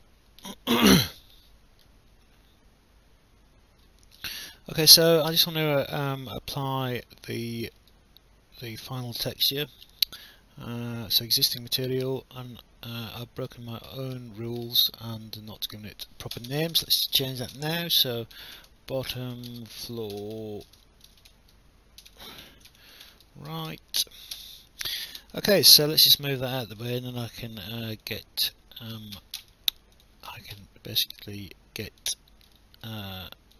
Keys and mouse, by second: 4.3 alt+click, 7.0 alt+click, 7.9 right click, 15.5 click, 16.3 BackSpace, 18.1-24.2 typing, 24.3 Return, 25.5 alt+click, 26.8 click, 28.0 click, 29.9 click, 31.3 click, 32.8 alt+middle click, 33.0 alt+click.